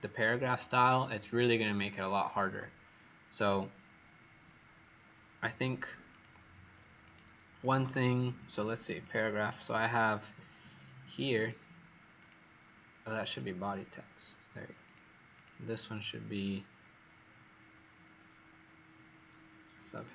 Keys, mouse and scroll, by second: 7.5 click, 8.9 click, 15.3 click, 19.9 click.